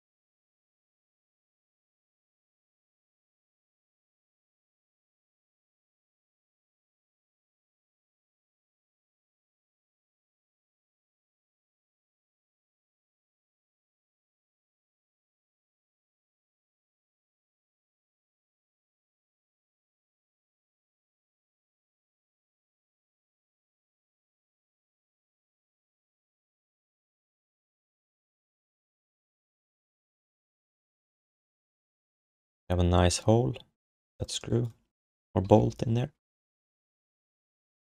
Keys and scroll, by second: 0.9-2.3 typing, 4.3 q, 4.9 alt+shift+d, 5.1 ctrl+s, 18.1 q, 19.7 alt+shift+d, 19.9 ctrl+s, 21.4 3, 23.3 6, 26.5 1, 27.1 alt+shift+d, 27.4 ctrl+s, 30.3 3, 35.5 ctrl+s, 35.9 alt+q, 37.5 1.